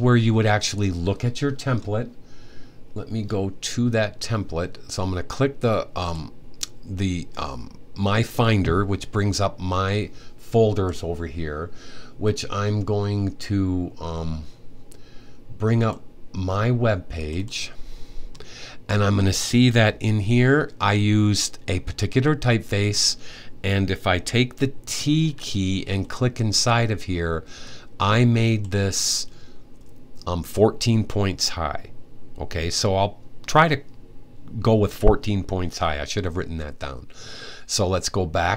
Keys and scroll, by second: 24.9 t.